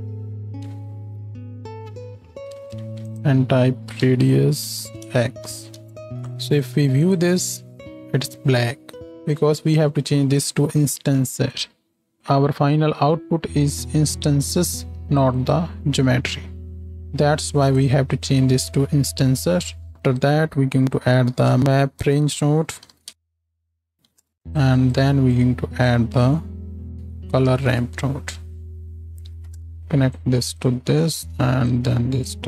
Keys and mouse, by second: 0.7 z, 3.8-7.5 drag, 7.5-10.3 ctrl+shift+middle drag, 10.3-12.2 drag, 12.2-14.5 middle drag, 14.5-15.5 drag, 15.5-17.7 middle drag, 17.7 click, 17.8-19.4 middle drag, 19.4-24.5 drag, 21.6 BackSpace, 24.5 middle click, 24.7-25.8 drag.